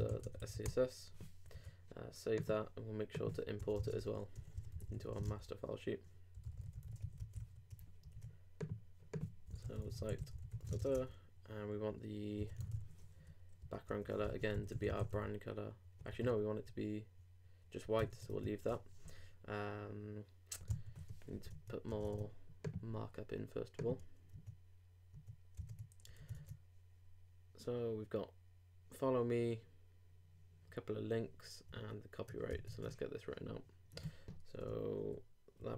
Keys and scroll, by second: 1.4 super+Return, 1.5 super+s, 3.8 shift+Return, 3.8 shift+2, 4.3 shift+i, 5.2 shift+space, 6.3 shift+f, 7.0 super+r, 7.1 super+Right, 7.2 super+;, 7.4 super+s, 8.1 super+w, 10.8 shift+[, 10.9 shift+Return, 14.2 shift+Return, 14.5 shift+b, 16.0 super+;, 16.1 super+z, 16.6 super+BackSpace, 18.0 super+BackSpace, 18.3 super+Tab, 21.5 super+Tab, 25.6 super+Tab, 31.7 super+Tab, 35.0 shift+h.